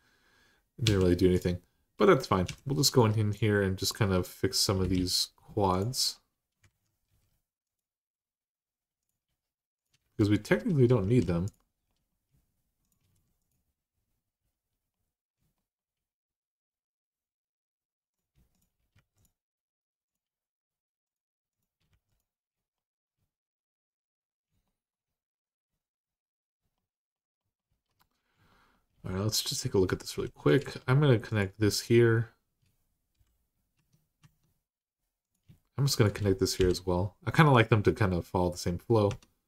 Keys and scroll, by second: 0.6 w, 2.2 2, 4.7 alt+z, 6.4 alt+z, 6.9 x, 9.8 x, 10.8 ctrl+z, 12.8 x, 18.7 x, 21.7 x, 30.0 1, 32.9 j, 33.5 Tab, 34.0 Tab, 35.4-36.4 typing, 38.9 Tab.